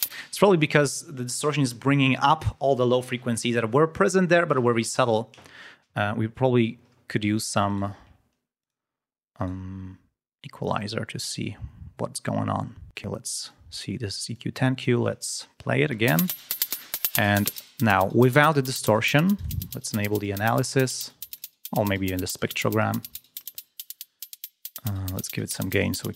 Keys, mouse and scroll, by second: 0.0 space, 7.6 right click, 8.5 click, 9.3 right click, 10.6-11.1 scroll down 2, 13.5 click, 14.3 click, 15.9 l, 17.4 click, 18.8 click, 19.3 click, 21.3 click, 25.1 click.